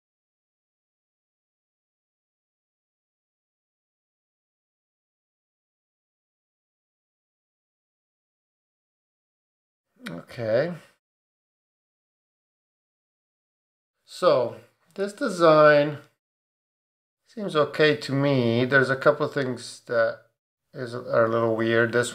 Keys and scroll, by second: 1.8 super+d, 6.4 Up, 10.7 Up, 11.4 Down.